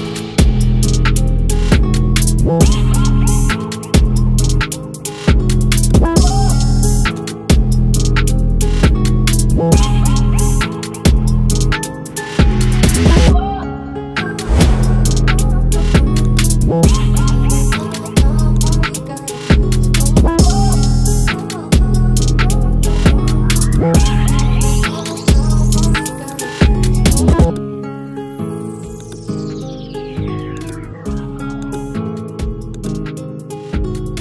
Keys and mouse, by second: 25.1-29.0 alt+drag.